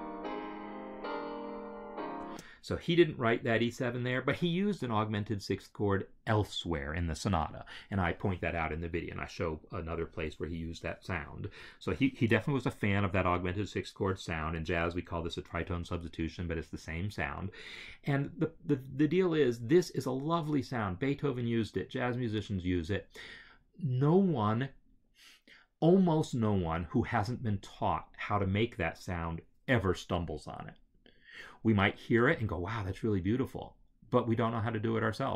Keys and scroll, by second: 2.1 space.